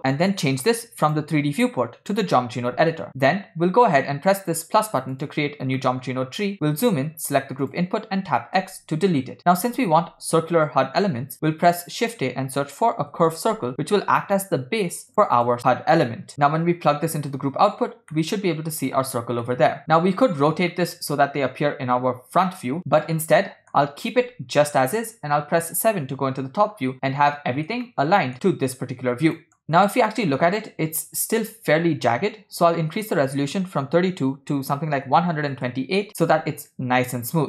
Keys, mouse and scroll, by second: 0.0 click, 1.0-2.4 drag, 3.3-4.5 middle drag, 5.2 drag, 5.9 middle click, 6.4 scroll up 2, 6.6 scroll down 1, 7.7 click, 8.7 x, 11.5 shift+a, 15.6-17.3 drag, 18.3-18.9 middle drag, 19.6-19.9 middle drag, 20.8-21.7 middle drag, 23.4-23.8 middle drag, 25.7 KP_7, 26.8-27.3 scroll up 5, 27.5 scroll down 2, 28.1-28.5 shift+middle drag, 29.6 middle click, 29.9 scroll up 1, 30.4 shift+middle click, 30.9-31.3 scroll up 1, 33.0-35.6 drag.